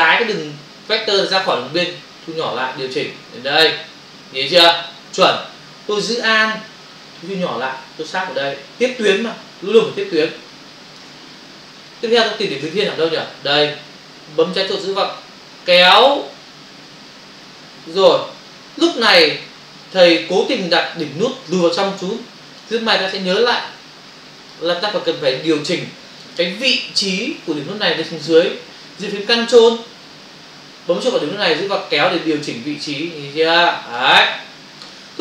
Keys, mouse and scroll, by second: 11.8 space, 15.4 click, 31.8 ctrl+click.